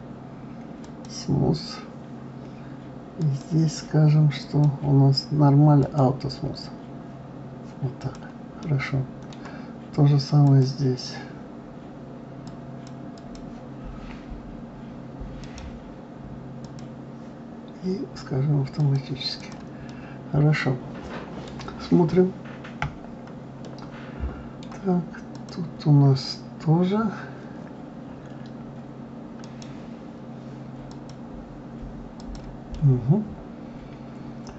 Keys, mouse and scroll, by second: 1.0-1.8 right drag, 3.2 click, 4.4 click, 5.8 click, 8.0 click, 8.5-10.5 middle drag, 10.5 click, 12.5 click, 13.2 click, 15.4-18.4 right drag, 18.8 click, 19.4 click, 19.9-22.8 middle drag, 22.8 KP_Divide, 23.6-25.3 middle drag, 25.3 click, 29.4-32.1 right drag, 32.1 click, 32.7-34.5 middle drag.